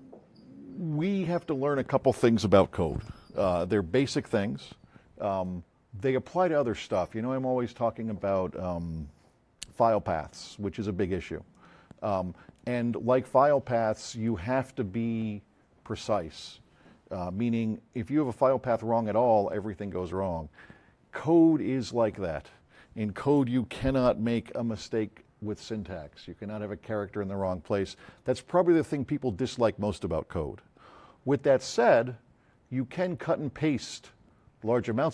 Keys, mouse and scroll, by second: 11.5-12.6 drag, 13.5 click.